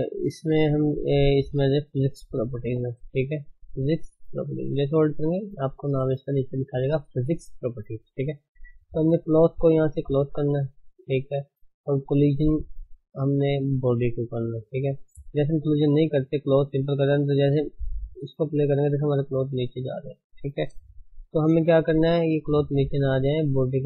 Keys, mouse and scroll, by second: 3.7-9.1 scroll up 1, 9.1-10.3 scroll up 1, 10.3-12.0 drag, 13.5-14.4 scroll down 1, 14.4-16.5 scroll down 1, 16.5 click, 18.1-18.9 drag, 18.9-19.6 scroll down 9, 20.1 space, 21.0 shift+Left, 21.4-22.5 scroll up 13, 22.5-23.8 shift+middle drag.